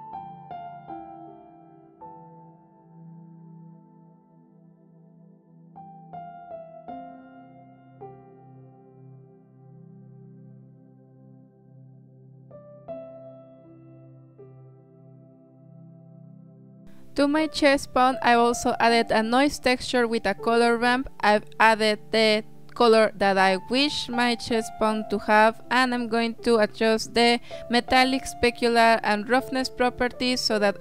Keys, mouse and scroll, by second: 0.0 s, 0.1-1.5 drag, 1.5 shift+a, 2.7-3.9 drag, 3.9 shift+a, 4.9 drag, 5.2 drag, 6.6 click, 7.9-9.4 drag, 10.2 click, 13.0 click, 13.5 click, 14.0 click, 14.9 click, 16.9 click, 17.8-18.8 drag, 19.2-23.8 drag, 24.2 click, 26.2 click, 27.0 middle click, 27.5 click, 28.8-29.2 scroll down 3, 29.2 click, 29.8 click.